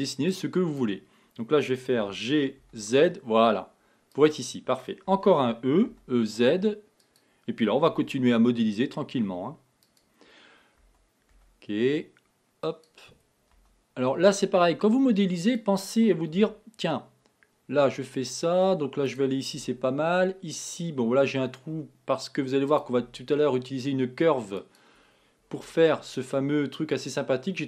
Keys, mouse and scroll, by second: 2.0 g, 5.1 e, 8.0 e, 11.0 e, 13.6 e, 16.5 e, 19.7 e, 23.1 e, 25.7-27.6 shift+middle drag.